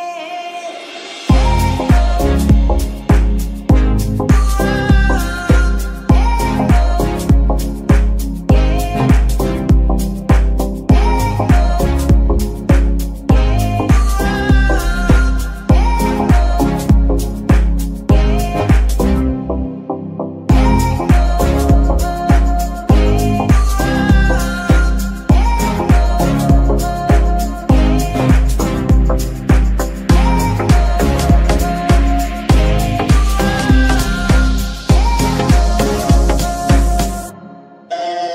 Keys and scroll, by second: 8.4 ctrl+Tab, 10.0 z, 10.9 g, 11.0 y, 13.8 Escape.